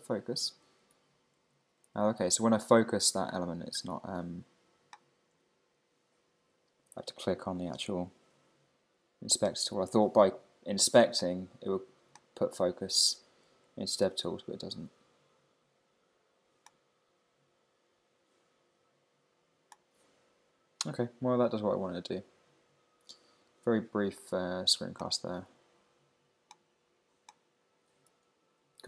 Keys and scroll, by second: 0.4 Right, 0.6 Down, 1.4 Up, 3.6 Down, 3.9 Up, 5.3 Right, 6.5 Down, 7.2 Up, 8.5 Down, 8.9 Up, 13.2 Down, 13.4 Up, 20.1 Right.